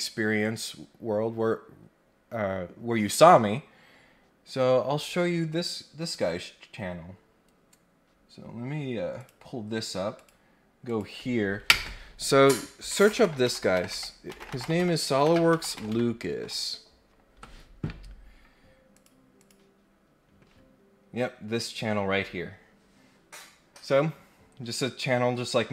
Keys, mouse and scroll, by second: 0.4 click, 6.0 click, 9.1 click, 10.1 click, 10.8 click, 18.9 click, 19.3 click, 25.2 scroll down 1.